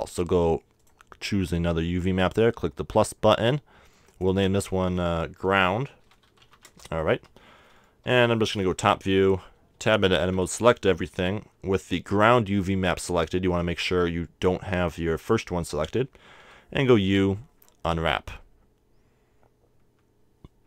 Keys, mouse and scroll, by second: 0.8-2.7 drag, 4.2-6.2 drag, 7.7-8.1 scroll down 1, 8.1 KP_7, 9.2 Tab, 9.9 a, 10.6 a, 16.5 u.